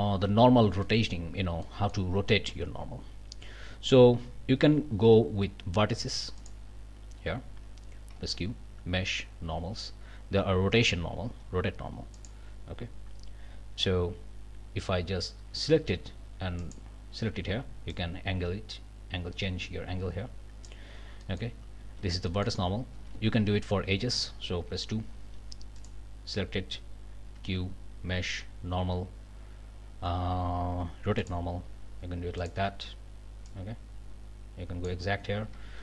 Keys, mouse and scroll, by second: 0.8 click, 1.6 click, 6.4 click, 8.1 q, 12.1 click, 16.6 click, 17.9-20.8 drag, 21.2 click, 21.8 ctrl+z, 22.3 ctrl+click, 23.0 a, 24.7 2, 25.8-26.1 alt+scroll up 3, 27.3 q, 31.2 click, 32.4 click, 33.5-35.8 drag, 35.6 ctrl+z.